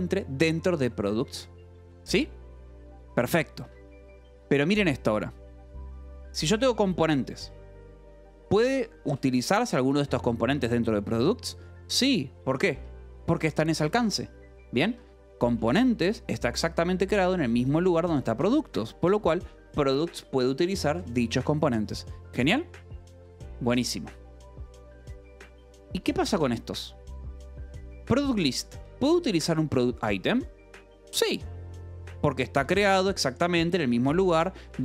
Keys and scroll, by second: 0.1 k, 1.4 j, 1.8 Escape, 2.9 shift+v, 3.6 Escape, 5.8 j, 6.6 j, 8.2 Escape, 8.4 k, 9.6 shift+v, 12.7 Escape, 13.4 j, 14.8 Escape, 14.9 k, 16.1 shift+v, 17.1 Escape, 17.3 k, 18.3 shift+v, 18.8 Escape, 19.2 j, 20.0 Escape, 20.5 j, 20.9 j, 23.6 Escape, 24.6 j, 25.1 k, 25.6 k, 26.5 shift+v, 28.5 Escape, 28.7 j, 29.5 shift+v, 32.0-34.1 typing, 33.9 Escape.